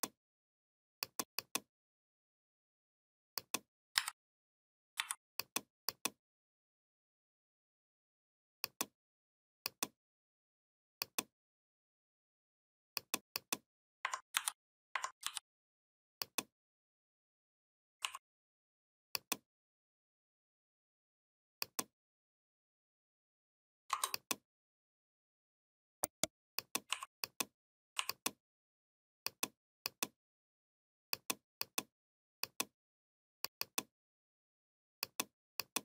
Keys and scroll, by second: 3.8 a, 4.8 v, 14.2 ctrl+c, 15.1 ctrl+f.